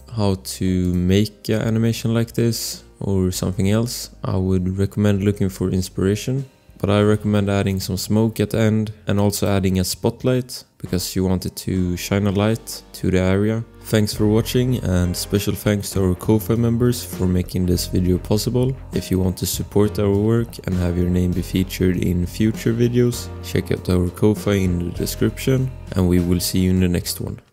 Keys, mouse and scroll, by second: 10.5 click.